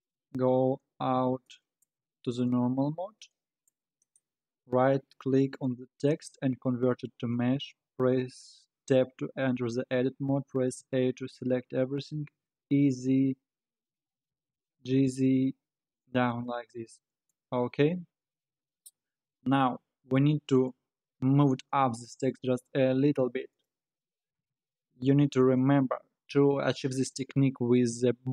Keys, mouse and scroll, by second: 0.3-1.0 scroll down 2, 1.0 alt+z, 1.5 middle click, 2.0 z, 2.6-3.2 scroll down 6, 3.2-4.0 middle drag, 4.0-7.5 right drag, 7.5-7.8 scroll up 5, 7.8 Tab, 8.4-10.8 scroll down 2, 10.8 a, 12.5 e, 14.8 g, 16.5-17.8 middle drag, 17.8 Tab, 20.0 KP_3, 22.0 g, 23.9-24.4 scroll down 4, 24.4 alt+z, 25.0 alt+z.